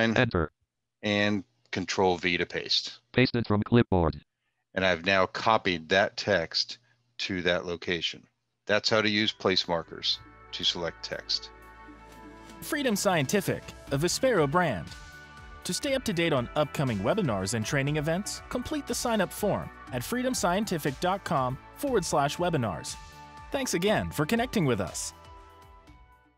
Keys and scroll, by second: 1.1 v.